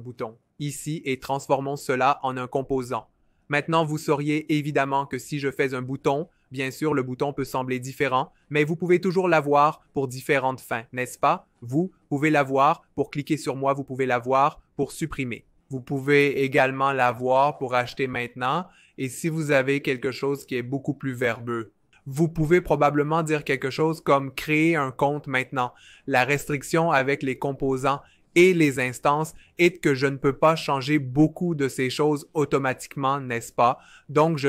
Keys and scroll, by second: 10.7-12.2 typing, 17.0-20.3 typing, 23.7-27.2 typing, 33.7 super+z.